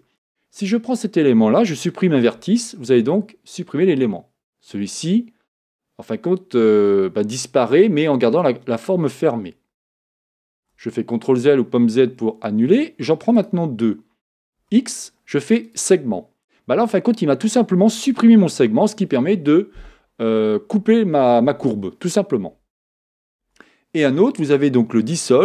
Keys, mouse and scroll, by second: 2.3 x, 10.6 z, 13.4 shift+click, 14.6 x, 18.0 Tab, 23.5 Tab.